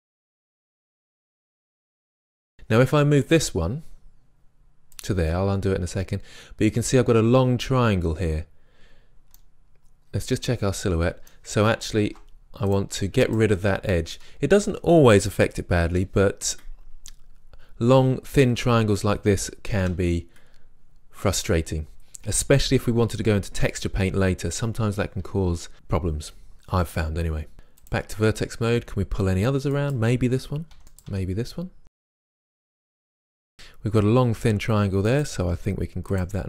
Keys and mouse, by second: 2.0 click, 2.0 g, 5.0-6.8 drag, 9.4 middle click, 11.1-12.0 middle drag, 12.0 ctrl+Tab, 13.3 click, 15.9 Delete, 19.8 Delete, 27.5 ctrl+Tab, 30.8 click, 30.8 g, 31.1 g, 32.2 click, 32.7 click, 35.1-36.2 right drag, 35.5 g.